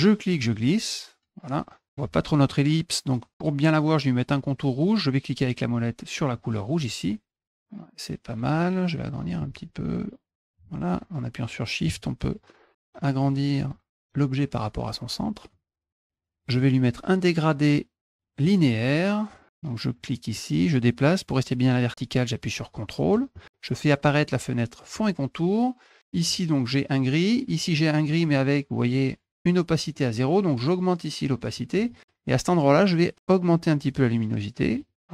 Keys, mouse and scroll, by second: 6.3 middle click, 7.4 click, 9.8 shift+click, 12.4 shift+click, 15.5 click, 18.4 click, 20.1-23.1 drag, 24.9 click, 26.1 click, 27.4 click, 30.7 click, 32.3 click, 33.1-34.7 drag.